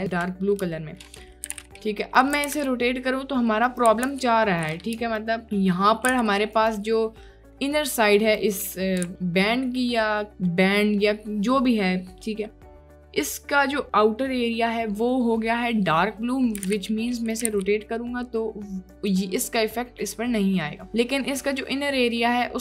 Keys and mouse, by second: 0.6 shift+click, 1.5 r, 1.6 x, 2.4 r, 2.5 y, 4.0 r, 4.2 y, 5.2 ctrl+click, 6.1 t, 6.2 c, 7.3 click, 9.1 ctrl+z, 12.2 click, 13.6 click, 16.6 r, 16.7 x, 17.4 r, 20.4 click, 21.1 click, 21.7-22.1 drag, 22.4 middle click.